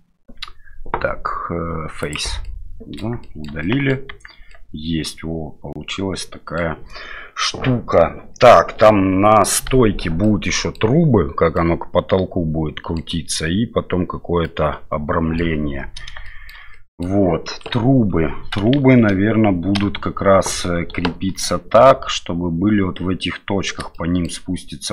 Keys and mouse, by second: 2.4 middle click, 3.2 shift+middle click, 3.6 middle click, 4.1 Tab, 4.5-6.6 middle drag, 10.2-10.8 middle drag, 11.5-13.0 middle drag, 14.4-15.4 middle drag, 16.2 shift+middle drag, 16.7 middle click, 17.7 KP_7, 18.8 shift+z, 19.7 KP_Divide, 21.0 KP_7, 23.9 shift+middle drag.